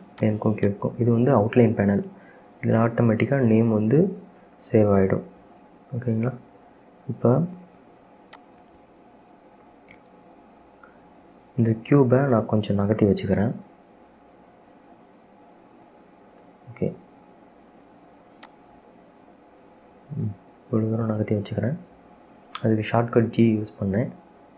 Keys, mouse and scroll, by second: 0.4 click, 0.8 click, 2.9-3.2 scroll down 1, 3.2-5.4 middle drag, 5.4-5.7 scroll down 1, 5.7-6.9 middle drag, 6.9-7.3 scroll up 2, 7.3 scroll down 1, 7.6-8.5 middle drag, 8.5 click, 10.8 KP_7, 13.9 g, 21.4-23.0 middle drag, 23.0-23.7 scroll up 2, 23.7-24.1 scroll down 3, 24.3 shift+middle click.